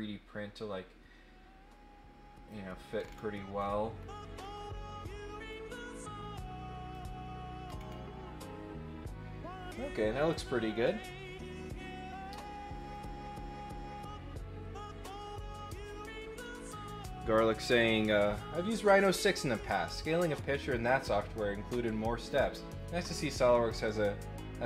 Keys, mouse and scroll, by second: 3.0 scroll down 2, 3.5-4.4 scroll up 8, 4.5 middle click, 5.5-6.9 drag, 7.7 scroll down 2, 10.3 middle click.